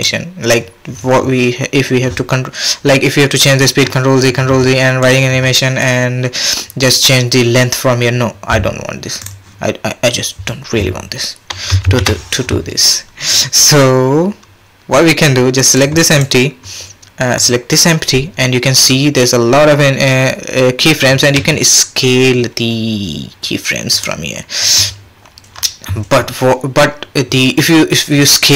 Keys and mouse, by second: 5.1-9.2 drag, 11.8 shift+Left, 13.3-15.3 drag, 15.8-16.2 drag, 21.4 s.